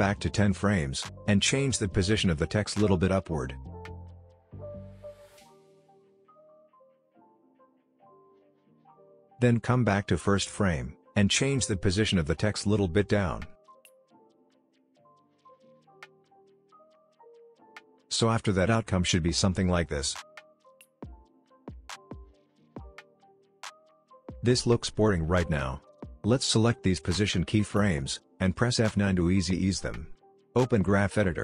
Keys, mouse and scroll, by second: 3.5-7.8 drag, 16.8-21.5 drag, 21.7 space, 23.6-24.8 drag, 28.2 F9, 30.5 click.